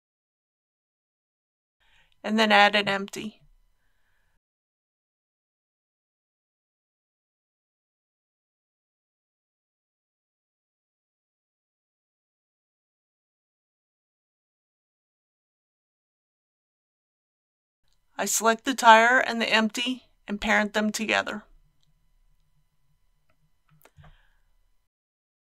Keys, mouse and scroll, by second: 2.7 shift+a, 7.8 click, 8.8 scroll down 1, 10.0-12.9 middle drag, 18.6 click, 20.3 Tab, 21.4 shift+click, 25.2 ctrl+p.